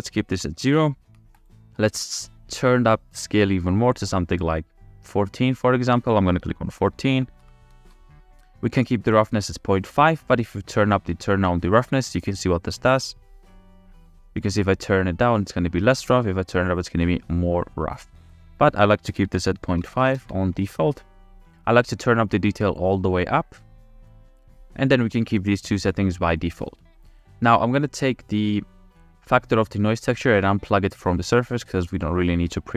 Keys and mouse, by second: 11.1-11.8 drag, 12.7-13.8 drag, 16.5-18.6 drag, 18.8 click, 27.2 click, 27.6 click, 31.0-32.3 drag.